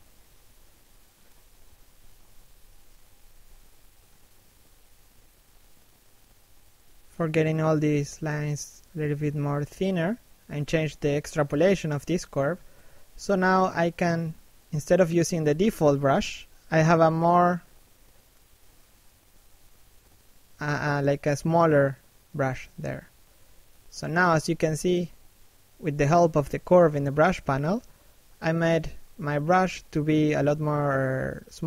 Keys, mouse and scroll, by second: 14.5 f, 15.3 right click, 16.3 f, 17.1 right click, 17.6-18.1 scroll up 1, 18.1 click, 19.7 shift+f, 20.3 click, 21.7 click, 25.9-26.2 scroll down 2, 26.2 shift+middle click, 26.7 middle click, 27.6 click, 29.9 middle click, 31.1 shift+middle click.